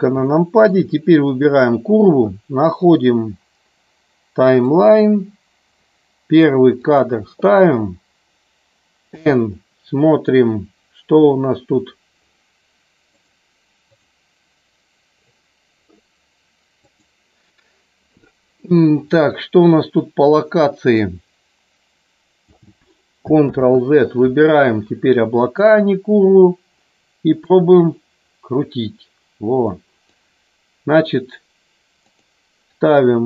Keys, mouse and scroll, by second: 0.3 shift+middle click, 1.1 click, 4.7 click, 6.9 click, 13.1 click, 16.8 click, 21.0-22.5 drag, 25.2 click, 27.4-30.0 drag, 32.0-33.2 drag.